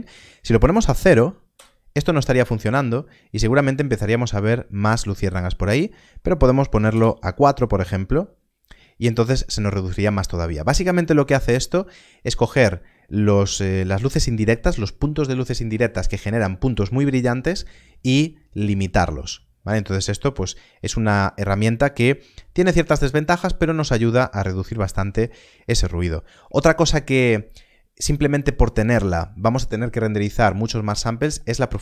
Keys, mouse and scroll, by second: 0.9 click, 1.5 Return, 5.5 Return, 6.6 click, 6.8 Return.